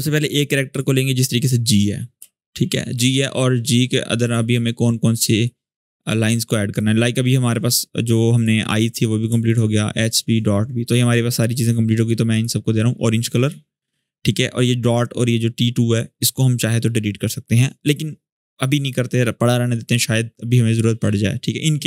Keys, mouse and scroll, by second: 0.5 click, 0.6 click, 1.1-1.9 scroll up 1, 2.1-2.7 click, 2.5 space, 4.0 click, 4.9 space, 5.2 click, 5.5 space, 7.5 space, 8.1 click, 9.2 ctrl+click, 10.6 click.